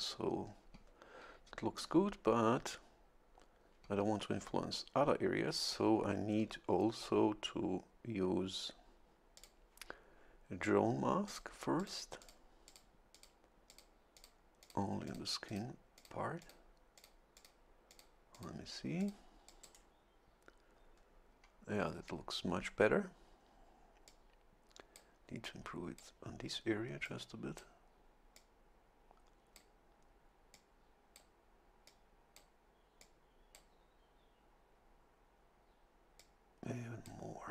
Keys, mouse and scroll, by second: 9.3 click, 11.3 click, 11.8 click, 12.2 click, 12.6 click, 13.1 click, 13.7 click, 14.1 click, 14.6 click, 15.0 click, 15.5 click, 15.9 click, 16.4 click, 16.9 click, 17.3 click, 17.9 click, 18.3 click, 19.0 click, 19.5 click, 24.1-25.1 drag, 25.4 click, 27.0 click, 28.3-29.7 drag, 30.5 click, 31.8 click, 33.0 click, 36.2-37.3 drag.